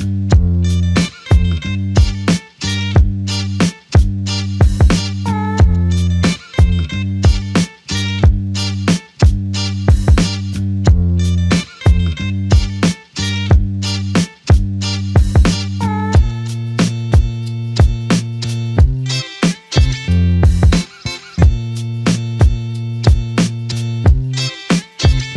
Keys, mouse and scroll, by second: 0.2 alt+shift+click, 4.0 shift+click, 7.0 shift+click, 10.1 shift+click, 14.1-14.5 typing, 15.5 typing, 23.6 alt+click.